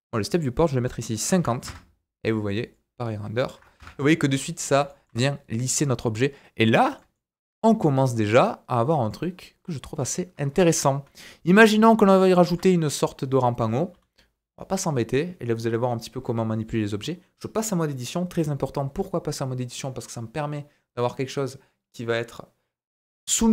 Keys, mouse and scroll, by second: 2.6 click, 4.5-4.8 scroll down 1, 4.9 shift+middle click, 7.0-9.8 shift+middle drag, 10.5 KP_1, 11.2 shift+middle click, 11.8-12.2 scroll up 3, 12.3 shift+middle click, 13.6 Tab, 13.9 a.